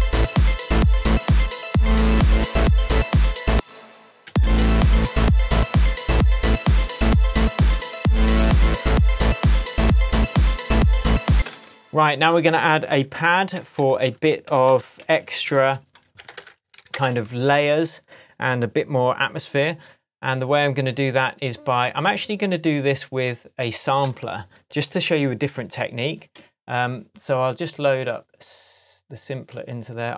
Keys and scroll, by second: 3.5 space, 11.3 space, 11.5 super+s, 13.6 shift+super+t, 14.7 super+r, 15.1-16.6 typing, 24.9 super+s.